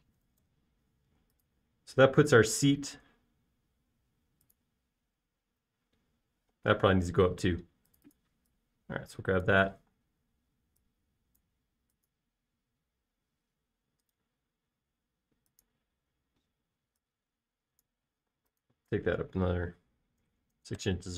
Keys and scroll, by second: 1.0-3.1 typing, 8.0 space, 10.8 m, 11.3 space, 19.3 m.